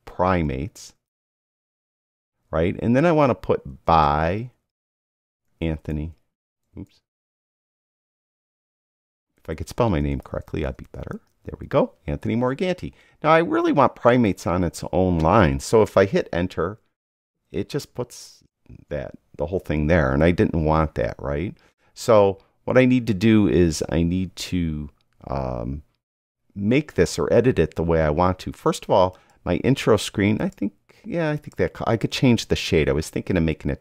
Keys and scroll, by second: 0.4-2.6 typing, 3.8-12.0 typing, 17.3 Return.